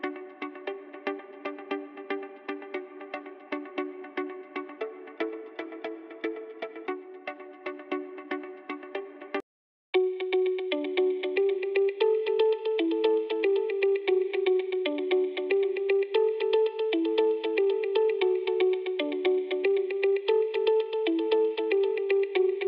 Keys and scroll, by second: 9.1 s.